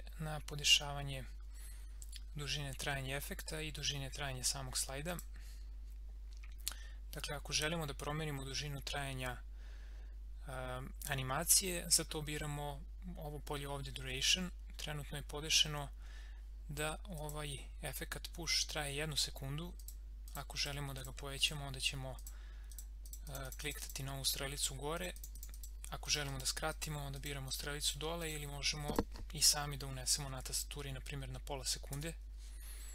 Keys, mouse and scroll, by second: 5.0 click, 17.1 click, 19.8 click, 29.9-31.1 typing, 31.9 Return.